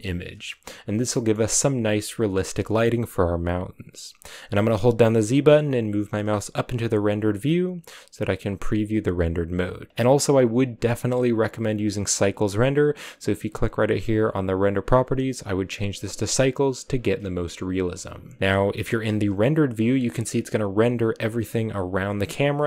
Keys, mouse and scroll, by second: 1.0 shift+middle click, 1.3-6.4 scroll down 1, 6.4 z, 11.2-17.4 drag, 17.8-18.5 scroll down 1, 18.5 z, 19.7-20.7 scroll down 2, 22.4 scroll up 2.